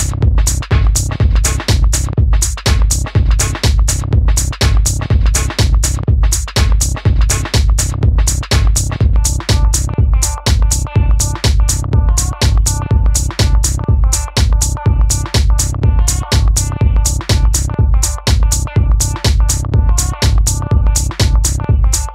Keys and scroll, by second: 0.8 super+z, 15.7-17.0 typing, 16.9 Return, 18.4 typing, 21.3 typing.